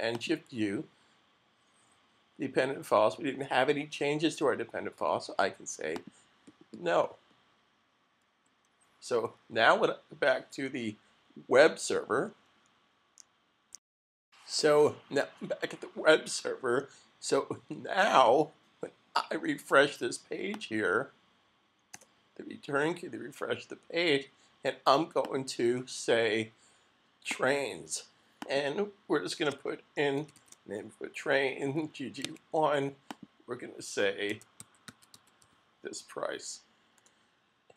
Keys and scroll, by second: 21.9 Return, 29.9-32.7 typing, 33.9-35.9 typing.